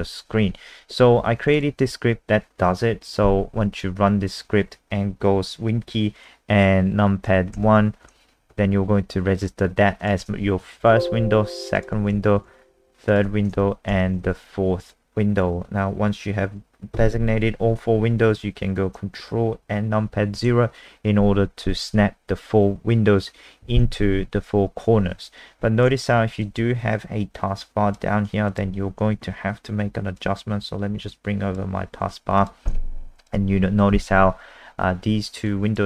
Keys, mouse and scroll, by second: 1.9 F5, 4.3 click, 7.6 super+KP_1, 9.0 BackSpace, 10.0 click, 10.8 super+KP_2, 11.8 click, 12.4 super+KP_3, 13.9 super+KP_4, 20.4 ctrl+KP_0, 26.4 super+click, 28.5 click, 28.9 Escape, 28.9 click, 30.2 click, 35.7 click.